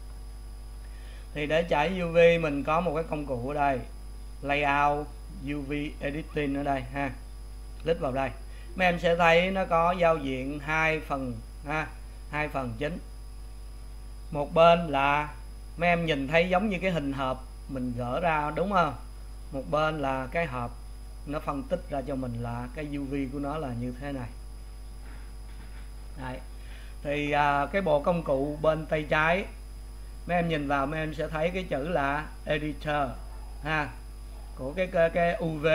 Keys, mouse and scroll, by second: 7.4 click, 19.5 scroll up 4, 20.7 scroll up 1.